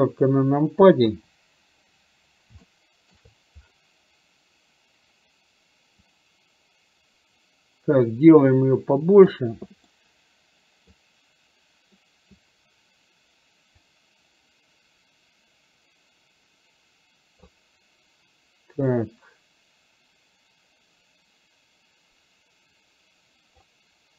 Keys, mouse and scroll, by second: 2.8-3.2 shift+middle drag, 6.2-9.3 drag, 10.1-11.1 middle drag, 13.8-17.5 drag, 18.8-23.8 drag.